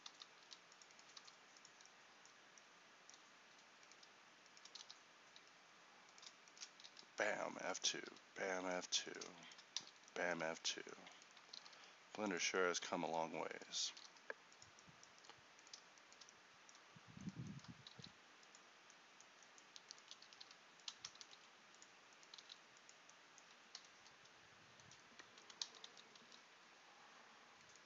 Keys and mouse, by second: 0.2 ctrl+z, 1.2 g, 4.9 f, 5.4 f, 11.6 g, 13.9 g, 18.0 alt+s, 20.3 g, 21.3 alt+s, 25.8 ctrl+z.